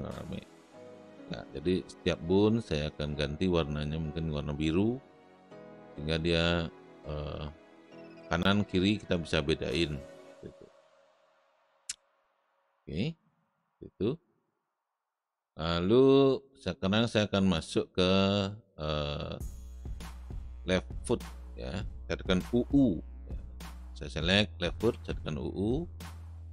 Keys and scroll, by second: 24.9 u.